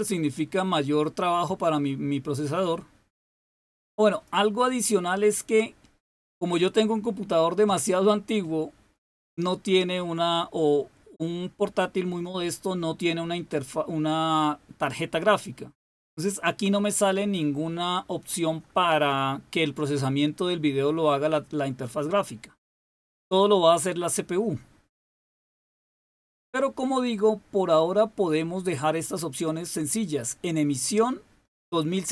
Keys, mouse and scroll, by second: 4.0 click, 25.9 click, 26.9 click.